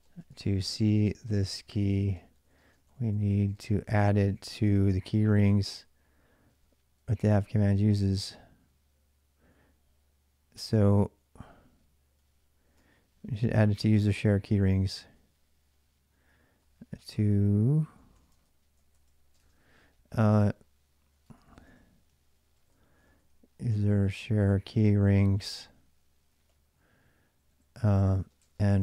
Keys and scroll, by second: 0.0-7.8 typing, 9.3-11.0 typing, 9.6 ctrl+[, 12.3-26.8 typing, 18.1 Return, 18.2 Return, 27.9-28.8 typing.